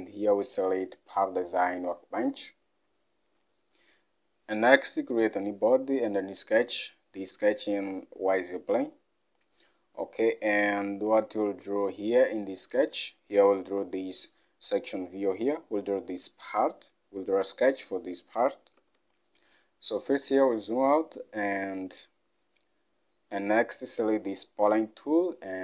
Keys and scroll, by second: 11.5 alt+Tab, 18.9 alt+Tab.